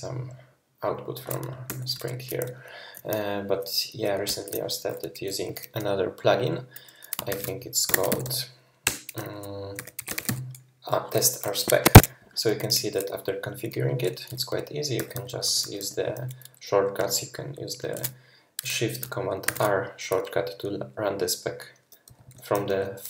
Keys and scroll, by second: 1.7 super+], 4.3 ctrl+Left, 7.3 shift+super+p, 7.6-10.8 typing, 8.8 Return, 11.9 Escape, 14.9-15.8 typing, 17.0 typing, 19.5 shift+super+r, 21.8-23.0 typing.